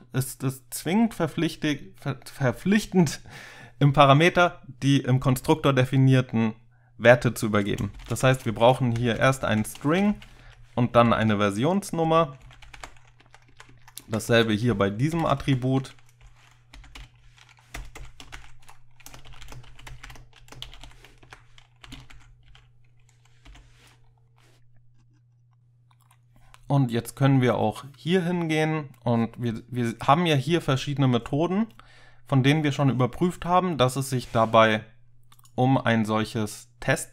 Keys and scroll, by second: 8.0-13.3 typing, 8.3 Left, 9.6 Left, 13.4 Down, 13.6 Down, 13.8 Down, 14.1 Down, 14.4 Left, 15.0-15.7 typing, 16.8 (, 17.8-23.5 typing, 21.3 Right.